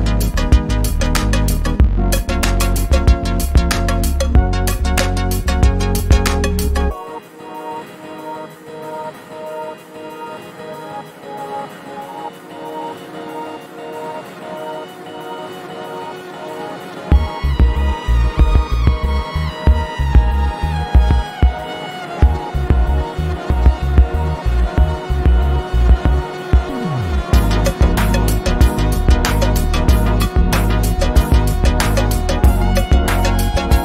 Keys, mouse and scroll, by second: 2.6 shift+click, 9.0 click, 11.3 ctrl+z, 13.5 click, 16.1 click, 18.6 ctrl+d, 19.4-22.2 ctrl+drag, 23.2 z, 23.6 z, 24.2 click, 24.8 v, 25.3 click, 26.0 ctrl+d, 26.2-28.7 drag, 30.4-31.0 click, 31.3 ctrl+z, 32.2-33.8 alt+drag.